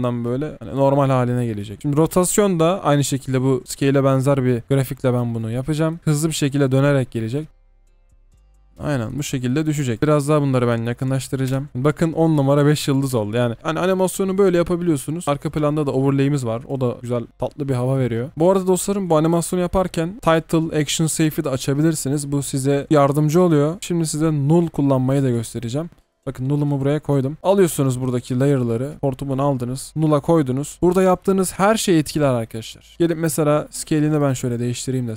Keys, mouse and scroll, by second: 1.8 double click, 7.5 space, 9.5 double click, 10.0-11.5 scroll down 1, 15.2 typing, 23.8 space, 25.9 right click, 28.5 shift+click, 30.7 double click, 31.5 typing, 32.9 Return, 33.0 typing.